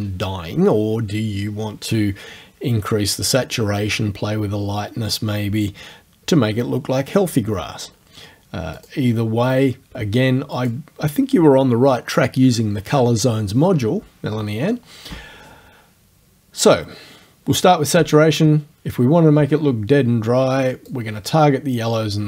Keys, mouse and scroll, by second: 8.7 click, 10.6 click, 20.9 click.